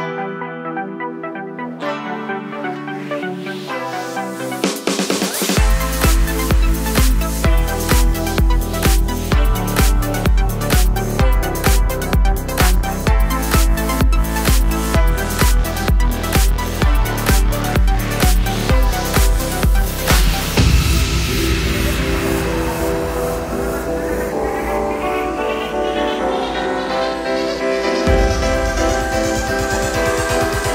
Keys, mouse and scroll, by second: 0.0 middle click, 0.0 g, 0.3 click, 0.6 alt+d, 1.7 click, 1.8 alt+d, 2.2 click, 2.3 s, 2.9 click, 4.2 drag, 4.4 shift+drag, 4.6 g, 6.5 click, 6.7 click, 6.8 alt+d, 7.2 click, 7.3 r, 9.7 KP_Enter, 10.2 g, 11.6 click, 11.9 alt+d, 12.8 click, 12.8-15.0 middle drag, 13.1 scroll down 2, 14.6 shift+Tab, 14.7-15.0 scroll up 2, 15.0 drag, 15.2 shift+drag, 15.3 shift+drag, 15.4 shift+drag, 15.6 shift+drag, 15.7 shift+drag, 16.2 shift+drag, 16.3 shift+drag, 16.4 shift+drag, 16.7 shift+click, 16.9 shift+click, 17.2 shift+click, 17.8 ctrl+p, 18.4 scroll down 2, 18.6-18.9 middle drag, 18.9 click, 19.3 g, 19.9 middle click, 20.2 click, 20.4 click, 20.7 g, 21.6-22.3 middle drag, 22.3 shift+click, 22.6 shift+click, 23.2 ctrl+p, 23.6 drag, 23.7 click, 23.9-28.1 middle drag, 24.1 g, 28.1 click, 28.3 ctrl+s, 28.6-30.7 middle drag, 29.2 KP_1, 30.2-30.6 scroll down 2.